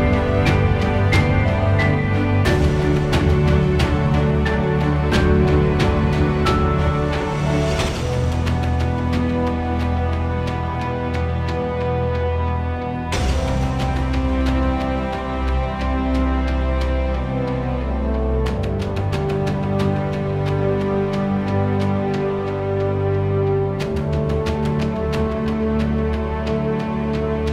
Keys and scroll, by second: 1.9 1, 2.3 0, 2.6 Return, 5.2 m, 7.9 5, 8.2 Return, 10.7 p, 12.8 4, 13.2 8, 13.5 Return.